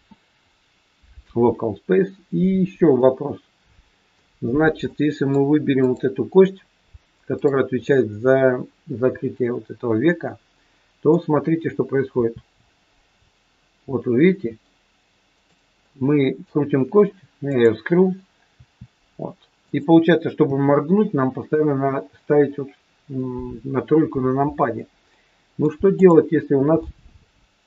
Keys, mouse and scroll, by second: 2.9 middle click, 4.8 middle click, 5.8 click, 7.4 click, 7.8 middle click, 12.2 r, 15.8 middle click, 17.4 click, 18.6 r, 20.4 KP_3, 25.0 middle click, 25.8 click, 26.4-26.8 scroll down 3, 26.8 middle click.